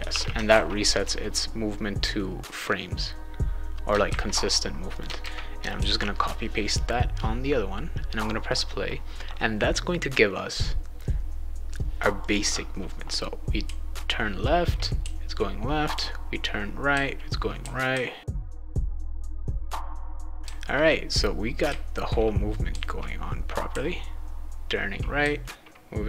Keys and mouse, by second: 0.0-0.6 typing, 2.5-3.9 drag, 4.1 ctrl+c, 4.9 click, 5.2 ctrl+v, 5.7 ctrl+s, 8.2 click, 12.2 click, 13.6 a, 15.0-21.7 typing, 22.7 s, 23.7 d, 25.2 w.